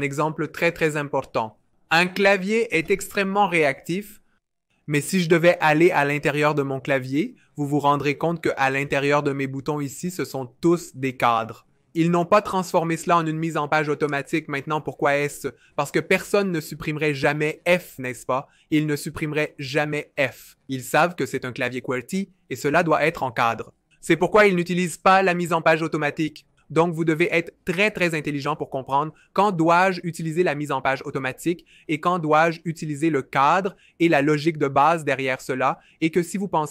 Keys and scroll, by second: 0.8 v, 17.2 BackSpace, 21.4 super+z.